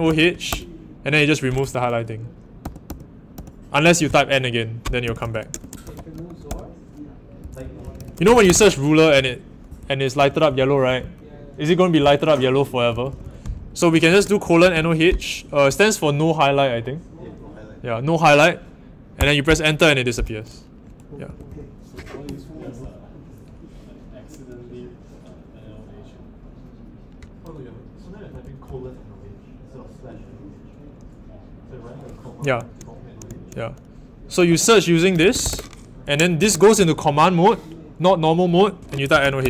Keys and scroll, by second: 0.0-0.5 typing, 2.6-15.1 typing, 19.2 Return, 21.2 typing, 28.0-29.1 typing, 34.3-35.9 typing, 38.8-39.4 typing.